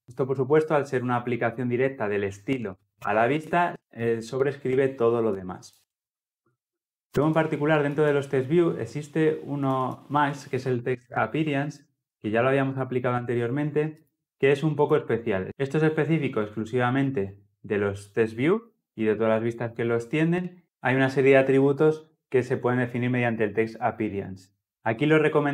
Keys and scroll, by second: 7.0 ctrl+z.